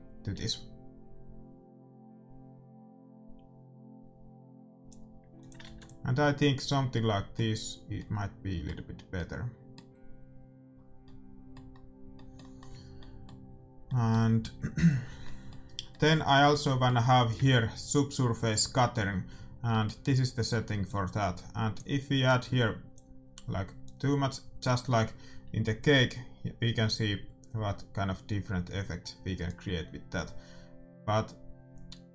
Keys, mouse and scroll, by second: 5.4-7.2 drag, 5.6 ctrl+s, 6.5-18.5 middle drag, 19.6-21.6 middle drag, 20.8-26.1 drag, 29.8-31.5 drag.